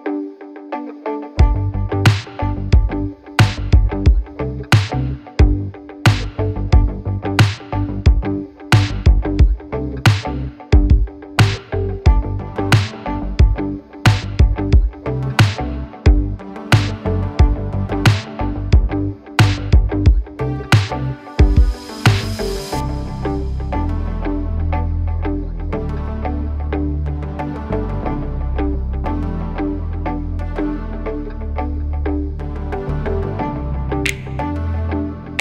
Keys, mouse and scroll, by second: 22.7-24.0 right drag.